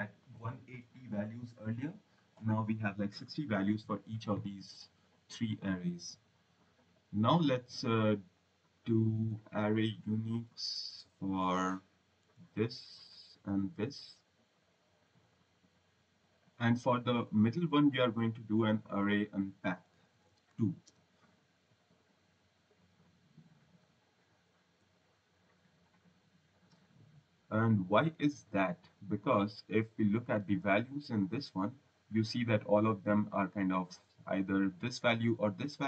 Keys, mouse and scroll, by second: 7.1 click, 7.9 click, 8.2 click, 10.2 ctrl+c, 12.2 v, 13.7 v, 14.2 click, 14.9 click, 16.3 click, 18.4 click, 19.8 a, 21.4 typing, 24.6 u, 26.4 click, 27.6 click, 29.4 click, 30.8 click, 33.0 click.